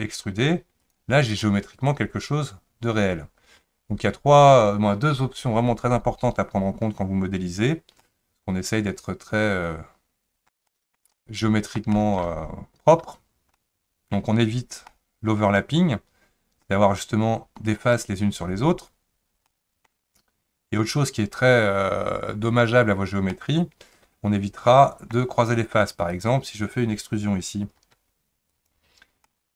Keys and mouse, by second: 8.0-10.5 middle drag, 10.7 shift+middle click, 11.1 middle click, 11.9 shift+middle click, 13.5 middle click, 14.9-16.6 middle drag, 17.8 click, 19.5 middle click, 23.3-25.1 middle drag, 26.1 click, 27.9 e, 29.3-29.5 middle drag.